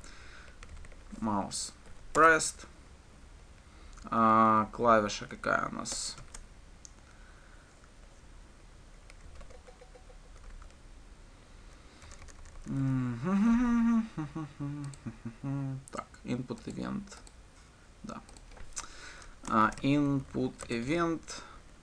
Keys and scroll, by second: 21.1 Return.